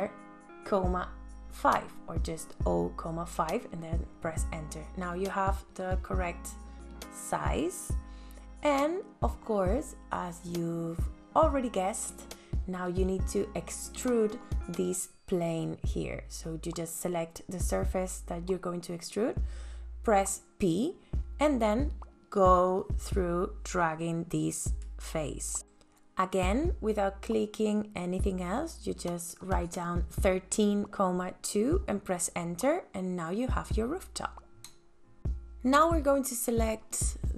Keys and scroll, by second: 0.4 ,, 3.4 v, 6.0 space, 19.9 p, 25.6 KP_1, 25.7 KP_3, 26.5 ,, 26.6 KP_2, 26.8 KP_Enter, 28.5 space, 35.5 f.